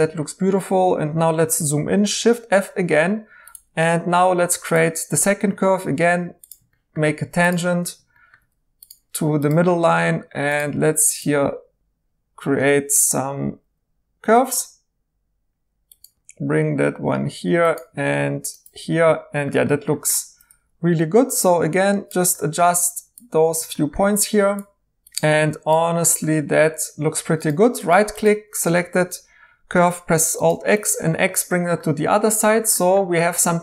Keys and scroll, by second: 2.1 f, 12.6 ctrl+z, 20.4 1, 25.0 ctrl+z, 27.2 2, 28.7 alt+x, 29.7 x.